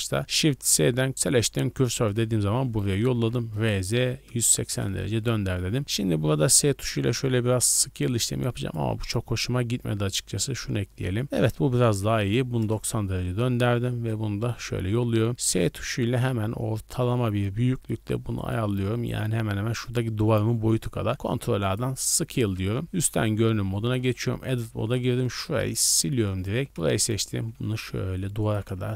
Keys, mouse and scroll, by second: 0.4 shift+s, 2.9 r, 3.1 z, 3.3 KP_9, 3.5 KP_0, 4.2 KP_Subtract, 4.7 KP_Enter, 5.8 scroll up 3, 6.3 s, 8.6 click, 8.9 x, 9.8-10.8 drag, 11.2 shift+middle click, 11.6 r, 11.8 z, 12.0 KP_9, 12.1 KP_0, 12.2 KP_Subtract, 12.6 KP_Enter, 13.7 shift+s, 14.8 s, 18.4 click, 20.5 scroll down 1, 21.1 ctrl+a, 22.0-22.8 scroll down 3, 22.8 KP_7, 23.3 z, 23.4-24.2 scroll down 3, 24.0 Tab, 24.2 scroll up 3, 24.3-27.6 typing, 26.9 shift+middle click, 28.4 ctrl+click.